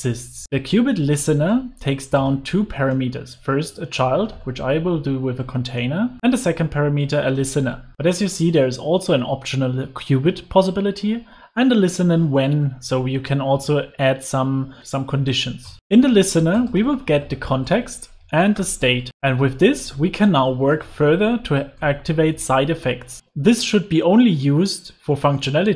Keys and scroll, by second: 0.4 Return, 6.2 ctrl+space, 15.8 Return, 21.4 super+s, 22.3 Escape.